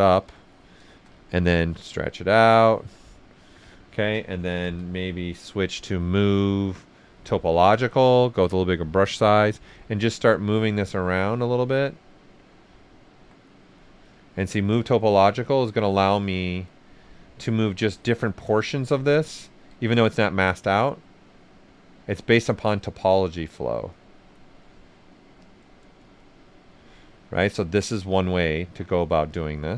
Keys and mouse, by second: 0.7 right click, 1.9 click, 3.0 right click, 3.5-5.2 typing, 7.2 click, 7.2 click, 7.7 s, 7.8 click, 8.8 typing, 8.9 alt+right click, 9.7 click, 12.8 alt+click, 13.4 click, 14.3 right click, 14.7 click, 15.3 right click, 16.2 click, 19.7 s, 20.5-22.2 drag, 24.7 right click, 25.4 click, 27.0 right click, 27.8 click, 28.2 right click, 29.3 click.